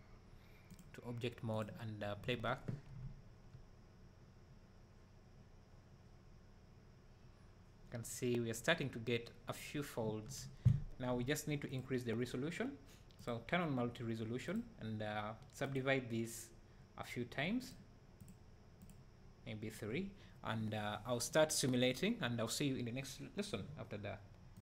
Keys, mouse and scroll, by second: 2.3 space, 15.7-17.7 drag, 18.3-24.6 drag.